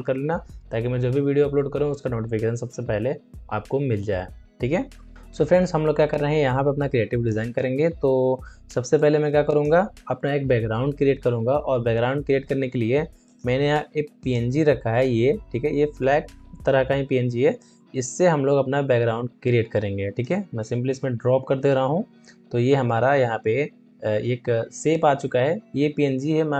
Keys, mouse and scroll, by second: 5.1 alt+scroll down 1, 5.5 space, 6.0 space, 8.9 click, 9.3 space, 13.2 click, 17.5-23.4 drag, 21.5 Return.